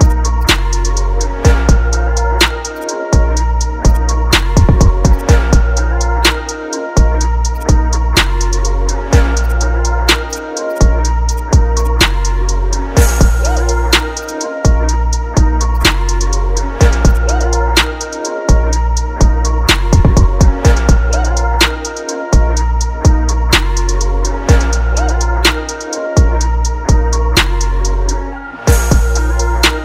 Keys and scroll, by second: 17.7 ctrl+t, 20.4 Left, 20.5 Down, 21.0 Left, 21.3 Down, 21.8 Left, 22.1 Down, 22.5 Left, 22.8 Down, 23.4 Left, 23.7 Down, 24.1 Down, 24.2 Left, 24.5 Down, 27.1 ctrl+KP_Subtract, 27.9 ctrl+KP_Add.